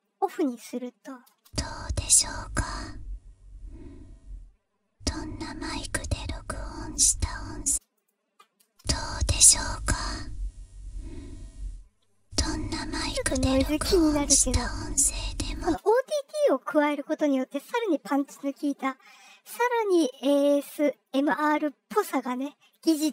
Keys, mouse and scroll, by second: 1.0-6.9 drag, 1.2 space, 7.6 space, 7.9 click, 8.6 space, 8.9-15.4 drag, 15.5 space.